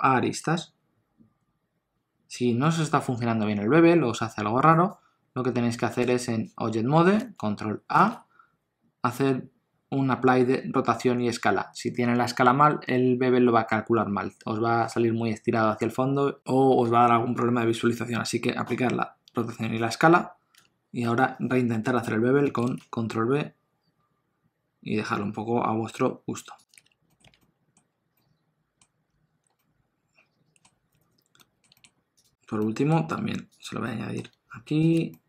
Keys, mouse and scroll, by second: 6.0 Tab, 7.9 ctrl+a, 20.5 Tab, 22.4 ctrl+b, 26.8 Tab, 27.1 middle click, 27.2 alt+a, 27.4 middle click, 27.9 scroll down 1, 28.1 middle click, 29.4 scroll down 1, 29.6 middle click, 31.4 middle click, 31.7 shift+middle click, 31.9-32.6 scroll up 2, 32.2 click, 32.6 middle click, 33.5 shift+click, 33.8 middle click, 34.8 shift+click, 35.1 middle click.